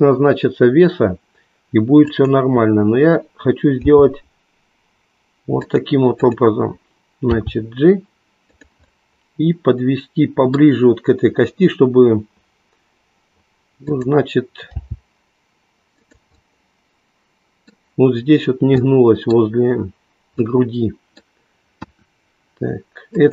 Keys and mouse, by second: 4.1 g, 5.6 click, 6.2 click, 7.3 g, 8.9-11.2 middle drag, 13.9 click, 15.9 g, 16.3-17.9 middle drag, 18.7 middle click, 20.3-22.5 middle drag, 22.5 KP_1, 23.1 click.